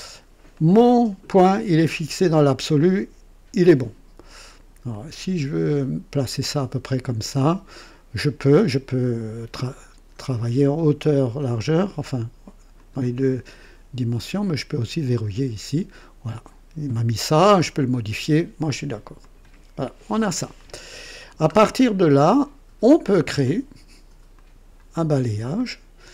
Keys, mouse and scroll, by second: 0.5-1.2 right drag, 4.8-7.2 drag, 12.7 click, 15.0 click, 19.1 click, 20.5-21.3 drag, 21.5 scroll up 2, 21.9-22.7 right drag, 24.3 click.